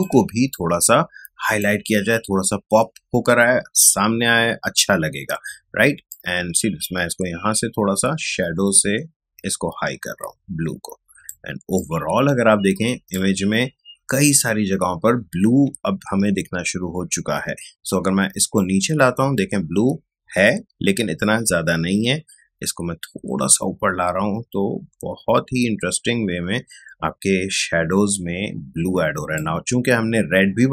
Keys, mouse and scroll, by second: 6.1-11.4 ctrl+drag, 11.4 ctrl+space, 11.7 ctrl+click, 11.9 ctrl+space, 15.7 ctrl+space, 18.5-28.5 ctrl+drag.